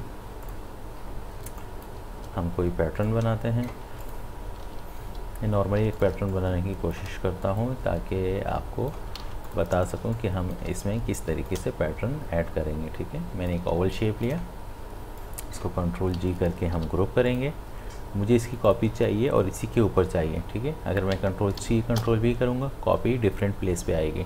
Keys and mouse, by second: 1.5 space, 1.6 click, 2.0 space, 3.1 click, 3.4 shift+click, 5.1 l, 5.8 space, 6.0 ctrl+click, 6.3 click, 6.7 space, 7.6-9.1 drag, 9.1 v, 9.5 click, 9.7 space, 9.9 ctrl+click, 10.2 click, 10.6 space, 11.5-16.8 alt+drag, 16.8 ctrl+g, 17.3 click, 21.6 ctrl+c.